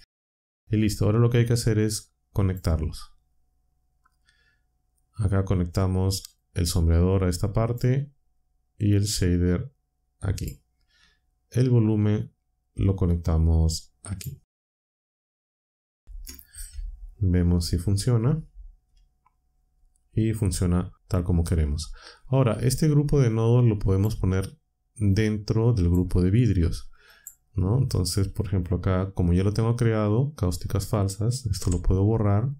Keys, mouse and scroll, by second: 1.1-2.6 drag, 6.3-7.9 drag, 9.0-10.6 drag, 12.7-14.3 drag, 15.7 ctrl+Down, 18.1 shift+z, 23.3-24.2 drag, 25.1-26.0 drag, 27.0 click, 31.6 Delete.